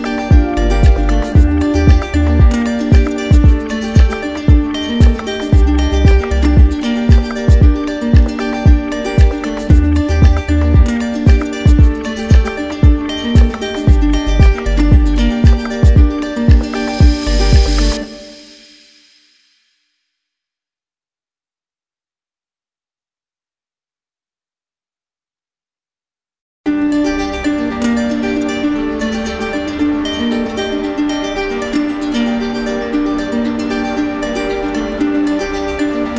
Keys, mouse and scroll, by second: 0.3 alt+click, 0.8 alt+click, 1.3 alt+click, 1.8 alt+click, 2.3 alt+click, 2.8 alt+click, 3.3 alt+click, 3.9 alt+click, 4.3 alt+click, 4.8 alt+click, 5.3 alt+click, 5.8 alt+click, 6.2 alt+click, 6.7 alt+click, 7.2 alt+click, 7.6 alt+click, 8.1 alt+click, 8.6 alt+click, 9.1 alt+click, 9.5 alt+click, 9.9 alt+click, 10.3 alt+click, 10.7 alt+click, 11.2 alt+click, 11.5 alt+click, 11.8 alt+click, 12.5 alt+click, 13.0 alt+click, 13.4 alt+click, 13.8 alt+click, 14.3 alt+click, 14.7 alt+click, 15.1 alt+click, 15.5 alt+click, 15.9 alt+click, 16.3 alt+click, 16.7 alt+click, 17.1 alt+click, 17.4 alt+click, 17.8 alt+click, 18.2 alt+click, 18.7 alt+click, 19.2 alt+click, 19.6 alt+click, 20.0 alt+click, 20.2 alt+click, 21.1 alt+click, 21.6 alt+click, 22.0 alt+click, 22.5 alt+click, 22.9 alt+click, 23.3 alt+click, 23.7 alt+click, 24.2 alt+click, 24.6 alt+click, 25.0 alt+click, 25.4 alt+click, 25.8 alt+click, 26.3 alt+click, 26.7 alt+click, 27.1 alt+click, 27.4 alt+click, 31.4 alt+click, 35.5-36.1 ctrl+click.